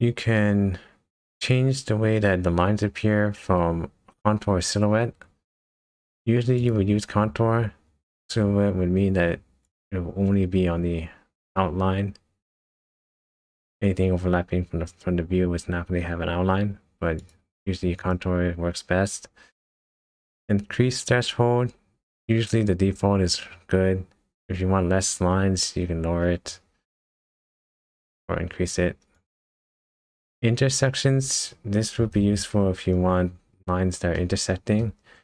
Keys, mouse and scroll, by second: 6.6 click, 17.2 click, 26.5 click, 32.1-32.6 scroll down 6, 33.1 scroll up 3, 34.1 shift+middle click.